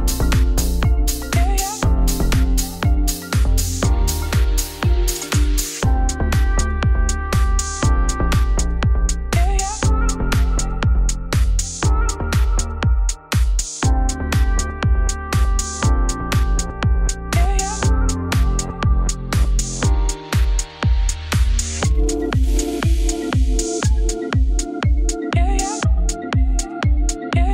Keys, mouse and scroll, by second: 1.6 ctrl+r, 3.6 s, 7.3 ctrl+b, 8.9 3, 9.0 click, 9.3 2, 9.4 shift+click, 9.7 ctrl+x, 10.2 click, 10.4 shift+click, 10.5 ctrl+x, 11.4 shift+click, 12.1 shift+click, 12.6 shift+click, 12.8 ctrl+x, 14.9 3, 15.0 shift+click, 15.5 middle click, 15.7-16.2 scroll down 2, 16.2 p, 16.8 Tab, 17.1 Tab, 17.2 ctrl+z, 17.3 ctrl+z, 17.4 ctrl+z, 17.8 shift+click, 18.3 p, 18.6 Tab, 18.8 click, 19.0 Tab, 19.1 middle click, 19.4-19.8 scroll down 1, 19.8 a, 20.5 e, 22.1 3, 22.2 alt+click, 22.7 alt+click, 23.0 alt+click, 23.4-24.7 shift+drag, 24.7 KP_Divide, 24.9 middle click, 25.5-26.8 alt+drag, 27.2-27.5 middle drag.